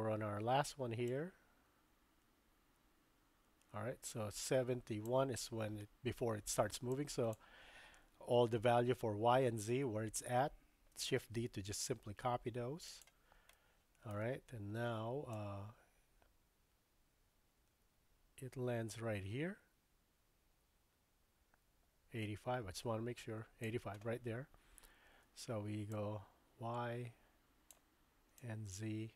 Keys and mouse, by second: 1.1-5.1 drag, 6.9-7.4 drag, 11.2 shift+d, 13.7 shift+middle click, 15.3-23.7 drag, 25.9-27.7 drag, 28.4-29.1 drag.